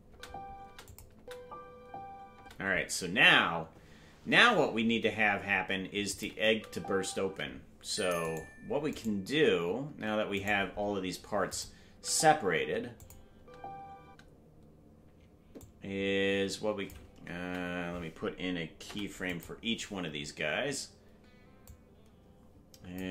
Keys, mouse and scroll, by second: 0.0 space, 0.8 click, 0.8 space, 1.1 space, 6.1 click, 6.5 space, 7.3 space, 8.3 right click, 9.9 ctrl+Tab, 9.9 right click, 10.4 right click, 11.5 click, 11.9 space, 13.0 click, 13.0 space, 13.3 space, 15.6-16.9 drag, 17.5 a, 18.8 i, 21.6-23.0 drag.